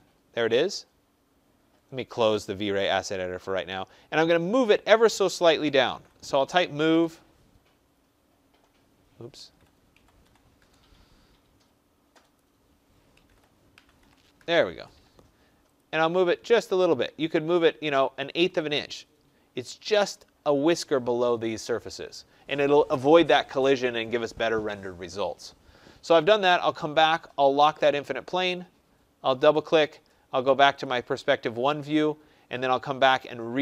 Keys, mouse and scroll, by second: 2.2 click, 2.2 scroll, 5.5-7.8 typing, 9.0-10.6 typing, 12.3 click, 12.8-14.5 typing, 15.5-16.2 typing, 15.7 click, 18.7 click, 19.2-19.6 scroll, 20.1-20.7 scroll, 23.7 scroll, 27.8 click, 29.6 click, 29.8 click, 30.8 click, 31.1 click.